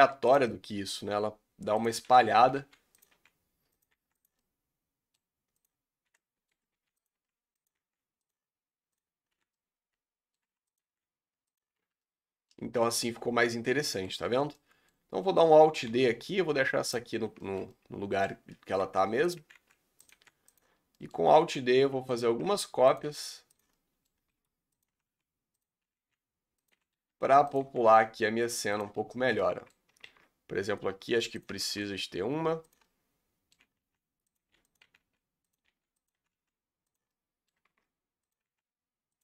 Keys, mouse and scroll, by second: 0.1 g, 0.5-1.8 middle drag, 1.8 click, 2.2 l, 2.7 g, 3.2 r, 4.0 g, 4.4-5.6 middle drag, 5.6 click, 6.2 middle click, 6.8 g, 7.2 r, 7.8 g, 8.9 click, 9.4 l, 9.6 middle click, 10.5 r, 10.8 g, 11.8 Tab, 12.1-12.6 middle drag, 12.6-13.1 scroll down 8, 13.1-14.2 middle drag, 14.2-14.6 scroll up 3, 14.6-15.9 middle drag, 15.9 alt+d, 17.5-18.4 shift+middle drag, 18.4 scroll up 2, 18.9 g, 19.5 r, 20.3 g, 20.9 scroll down 2, 21.0 middle click, 21.5 alt+d, 22.4 r, 23.2 g, 23.8-24.4 middle drag, 24.4 alt+d, 25.0 r, 25.9 r, 26.9 r, 27.7 g, 29.1-29.4 scroll down 4, 29.5-30.2 shift+middle drag, 30.2 alt+d, 31.7 shift+middle drag, 31.9-32.3 scroll up 1, 32.3 g, 33.0-33.8 middle drag, 33.8-36.2 typing, 37.2-37.9 middle drag, 37.9 alt+d, 38.5 r.